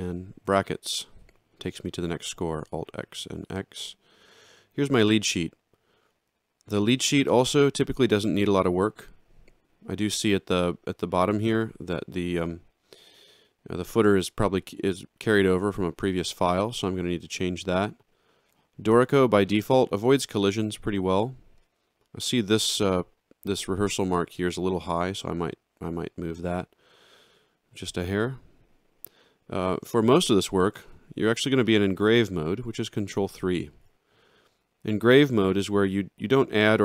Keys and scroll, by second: 0.4 alt+shift+], 2.9 alt+x, 33.7 ctrl+3.